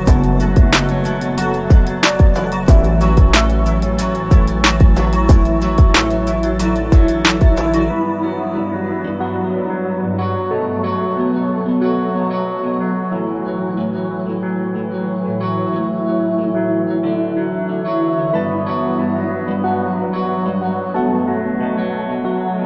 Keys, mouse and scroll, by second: 1.1 alt+scroll down 2, 1.5-2.1 scroll up 1, 2.2 scroll down 1, 6.1 click, 8.0-8.4 scroll up 1, 8.6-9.4 scroll up 1, 9.4 click, 16.7 click.